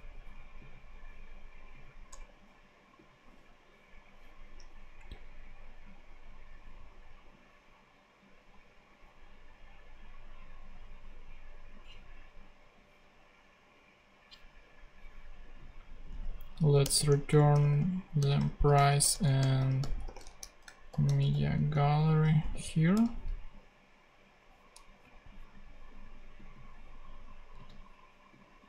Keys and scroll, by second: 2.0 BackSpace, 16.3 Up, 16.5 super+Right, 16.7 super+Return, 17.0-22.9 typing, 18.9 Return, 27.5 super+c.